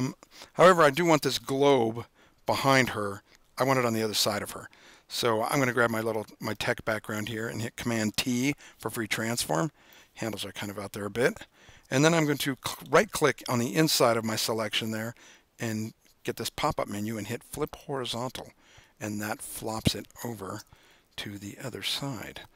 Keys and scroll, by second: 8.3 super+t, 20.7 Down, 20.9 Down, 21.0 Down, 21.1 Down, 21.3 Down, 21.4 Down, 21.6 Down, 21.7 Down, 21.9 Down, 22.1 Down, 22.2 Down.